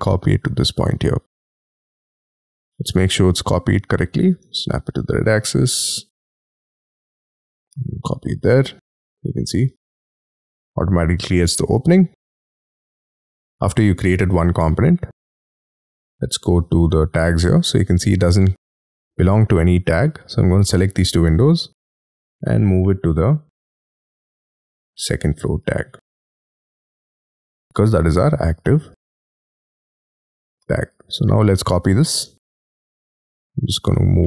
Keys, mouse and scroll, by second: 1.4 middle click, 2.1 scroll up 5, 4.4 Right, 5.4 y, 5.6 scroll down 5, 5.9 y, 6.2 middle click, 7.9-8.3 scroll down 4, 8.4 y, 8.7 middle click, 9.7-10.1 scroll down 7, 10.2 shift+middle click, 11.2 space, 11.7 scroll down 4, 12.0 scroll up 5, 12.3 m, 13.6 space, 18.2 double click, 19.6-20.4 scroll down 6, 20.5 ctrl+click, 27.9 scroll up 5, 28.5 double click, 28.8 double click, 29.4 m, 29.5 scroll up 5, 31.0-31.5 scroll down 9, 33.1 y, 33.6 scroll down 4, 34.1-34.2 scroll up 16.